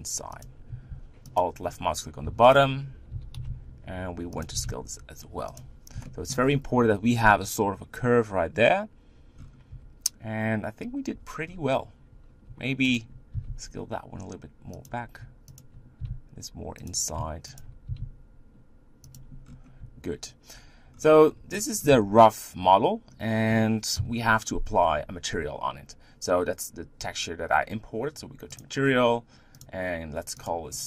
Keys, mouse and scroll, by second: 1.3 alt+click, 2.2 e, 3.1 g, 4.6 s, 6.0 shift+middle click, 6.4-8.6 scroll up 3, 9.4-9.7 scroll down 5, 9.7 Tab, 11.1 Tab, 11.4 scroll up 4, 12.9 alt+click, 13.4 s, 15.5 alt+click, 16.3 s, 17.6 alt+click, 18.2 s, 19.4-20.9 scroll down 5, 20.9-21.5 scroll down 3, 21.5 middle click, 21.9 Tab, 23.9 KP_1.